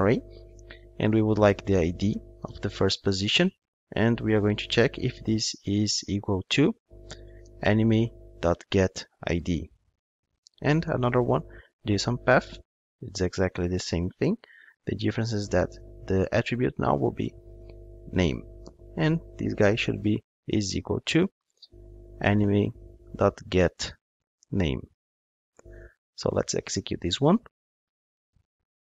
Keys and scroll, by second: 6.5 Return, 14.3 super+c, 16.1 super+v, 20.6 Return, 26.9 ctrl+shift+d.